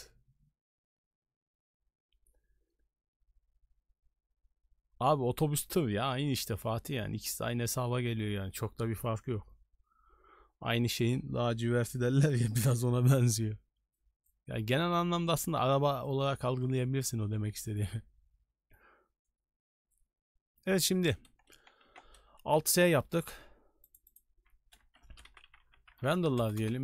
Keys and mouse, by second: 21.9 alt+s.